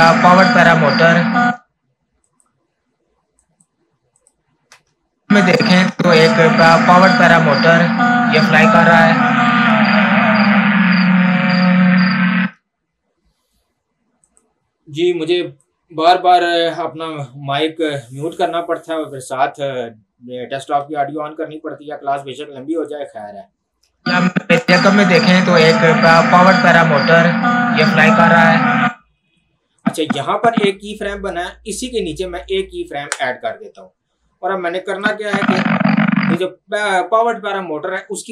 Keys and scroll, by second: 1.4 space, 4.8 space, 12.4 space, 24.0 space, 28.8 space.